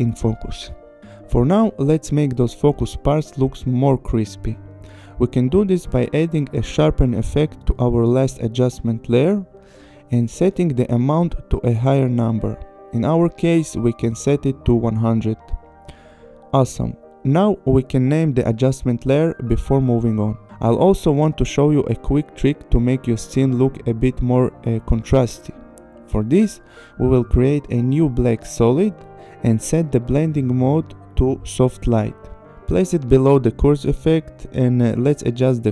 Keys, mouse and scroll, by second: 1.9 scroll, 2.6 click, 3.4 scroll, 3.7 click, 5.2 click, 6.4-7.3 typing, 8.0 click, 9.6-10.4 scroll, 11.0 click, 12.9 click, 13.1 KP_1, 13.1 KP_0, 13.3 Return, 14.9-15.7 scroll, 17.8 click, 17.9 Return, 18.6 ctrl+c, 19.1 click, 19.2 Return, 19.8 ctrl+v, 20.6 /, 21.2 click, 21.2 Return, 21.8 ctrl+c, 22.3 click, 22.6 Return, 22.8 Right, 23.5 ctrl+v, 23.7 Return, 25.1 click, 25.9 click, 27.2 right click, 28.5 click, 29.9 click, 30.3 click, 31.4 click, 31.9 click, 32.5 click, 33.8 click, 34.5 click.